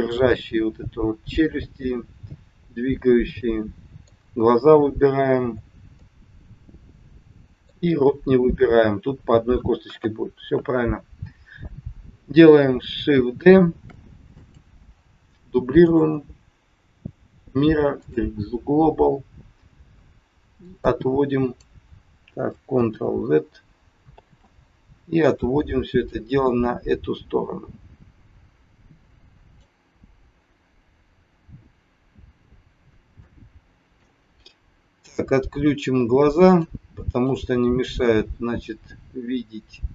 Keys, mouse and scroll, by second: 1.3 middle click, 5.4 scroll down 1, 5.9 middle click, 8.3 scroll down 2, 9.8 KP_1, 13.6 shift+d, 15.8 right click, 20.5 click, 21.0 click, 22.7 ctrl+z, 24.0 ctrl+z, 26.1 click, 30.0-30.6 scroll up 2, 30.9-31.2 scroll up 2, 33.3 shift+middle click, 36.4 click, 37.2 click, 37.8-38.2 scroll up 2.